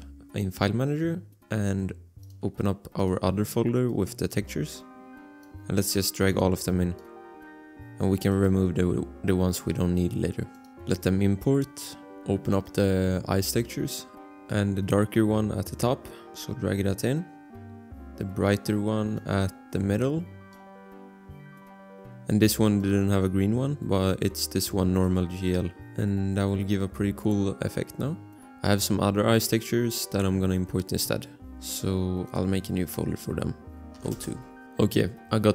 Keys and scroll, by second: 34.0 2, 34.1 Return.